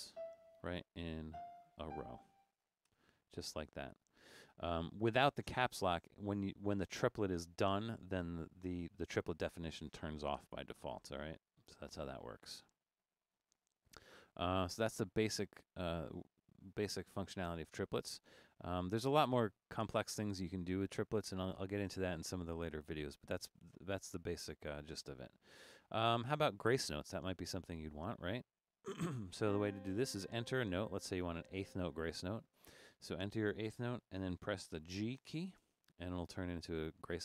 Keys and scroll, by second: 3.0 0, 12.7 Caps_Lock, 12.9 Escape, 16.9 BackSpace, 31.6 4, 35.3 g.